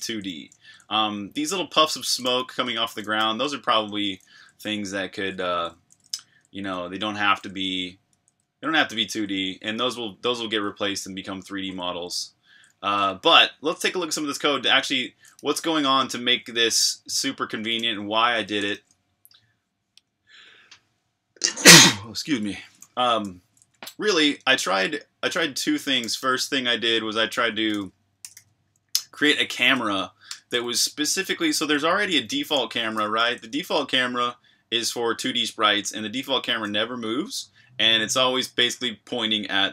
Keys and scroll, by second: 0.0-8.1 typing, 10.0-18.3 typing, 18.7 super+q, 23.2 k, 23.4 k, 23.6 k, 25.8-33.8 typing.